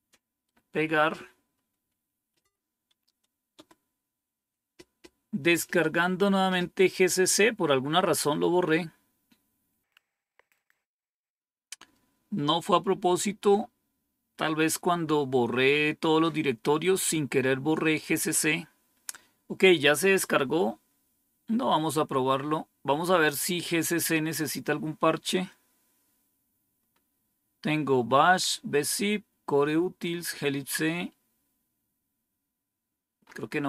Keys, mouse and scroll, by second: 2.3 Right, 3.4 Return, 23.1 click, 25.6 scroll down 2, 26.8 scroll up 2, 29.9 scroll down 2, 31.1 scroll down 2, 31.6 scroll down 2, 33.1 scroll up 2.